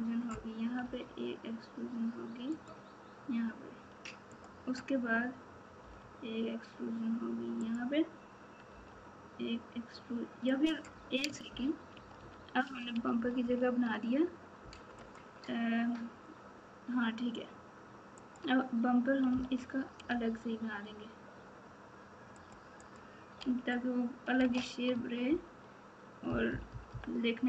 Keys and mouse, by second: 4.4 click, 5.8 e, 8.7 e, 11.9-13.8 ctrl+z, 18.1 click, 19.2 g, 22.9 click, 23.4 alt+z, 24.9 Tab, 26.2 KP_4.